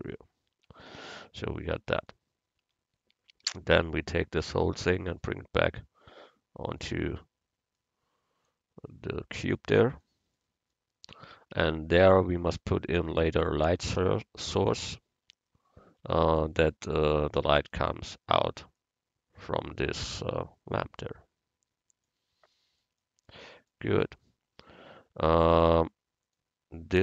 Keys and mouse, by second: 0.6 Tab, 1.1 middle click, 2.7 Tab, 3.5 a, 4.5 l, 5.4-7.1 drag, 8.5-10.1 drag, 11.6 Tab, 13.4-14.7 drag, 15.0 click, 16.1 a, 18.9 click, 19.2 right click, 19.5-21.4 middle drag, 23.1-24.1 middle drag, 26.3-27.0 right drag.